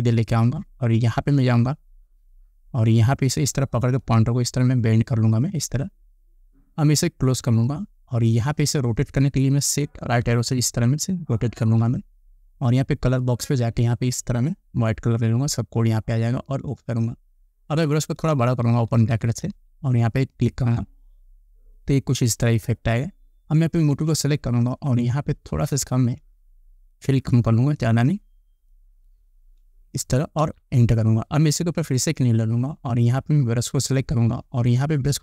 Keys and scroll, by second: 10.6 shift+Right, 18.4 ], 30.6 Return.